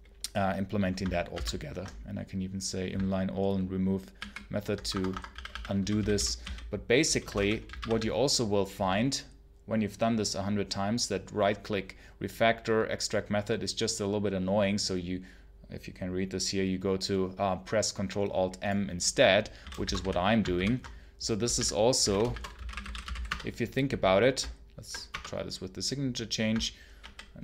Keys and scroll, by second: 1.2 ctrl+alt+n, 4.0 alt+r, 4.7 Escape, 4.9-7.7 typing, 19.2-23.5 typing, 20.4 ctrl+alt+m, 24.9 Return, 26.9 alt+a.